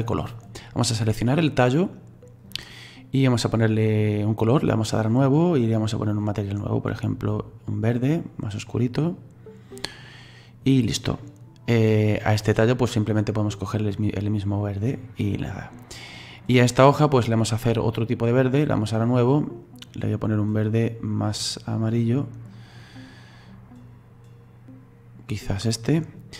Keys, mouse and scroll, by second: 0.8 right click, 5.0 click, 12.0 right click, 14.9-16.2 drag, 16.2 right click, 19.1-20.4 drag.